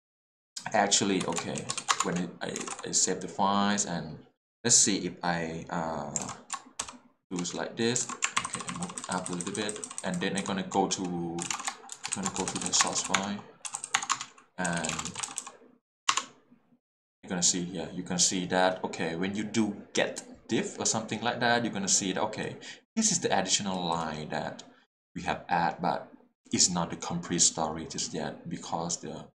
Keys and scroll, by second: 1.2 Escape, 1.8 w, 1.8 w, 1.9 Return, 2.6 alt+a, 3.1 l, 6.2 alt+a, 8.0 alt+shift+a, 11.4 Print, 11.5-15.4 typing, 13.2 Tab, 13.9 Tab, 14.1 Return, 16.1 Return.